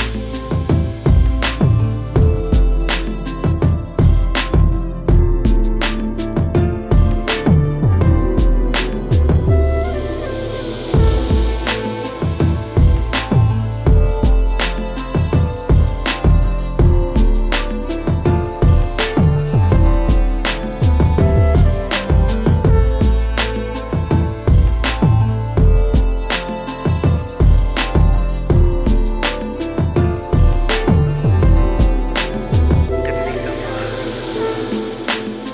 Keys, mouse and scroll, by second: 0.1 middle click, 0.3 middle click, 0.3 middle click, 0.5 middle click, 0.9-2.3 scroll, 2.6 click, 3.5-4.5 alt+scroll, 4.7 alt+middle click, 4.8 click, 5.0-6.0 scroll, 6.1 middle click, 6.4 alt+middle click, 7.7 shift+click, 8.1 alt+middle click, 8.7 click, 9.2 middle click, 11.1 f, 11.2-12.2 drag, 12.9-15.2 alt+middle drag, 15.5 click, 16.1-16.9 scroll, 17.0 alt+middle click, 18.0 alt+scroll, 18.8-19.7 scroll, 22.1 click, 22.4-23.8 alt+middle drag, 24.6 click, 25.6 middle click, 26.5 alt+middle click, 27.2 middle click, 29.7 click, 30.5 click, 31.4 click, 31.8 click, 32.8 click, 33.3 click, 33.8 click, 35.0 click.